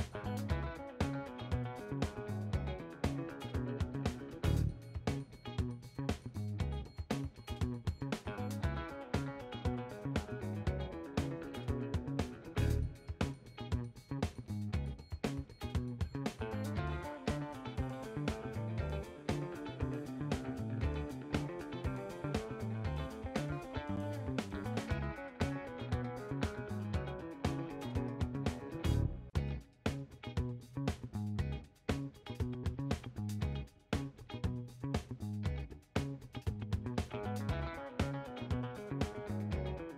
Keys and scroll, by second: 11.3 ctrl+a, 21.9-24.6 typing.